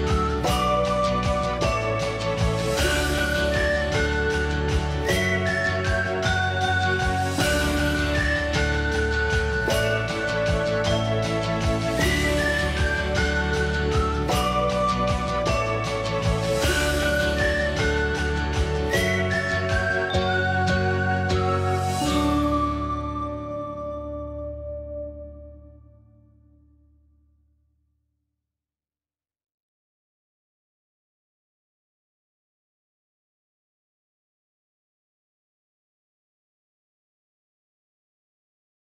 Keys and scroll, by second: 1.1 Escape, 8.8 ctrl+c, 9.0 Escape, 9.2 Escape, 10.0-10.8 typing, 11.0 Return, 12.4-14.2 typing, 15.9-17.5 typing, 19.1 ctrl+g, 20.7 Delete, 21.6 Escape, 21.9 ctrl+a, 22.3 ctrl+h, 23.0 e, 23.7 l, 24.7 e, 24.8 Escape, 26.5-31.2 typing, 33.0-33.9 typing, 36.2 m.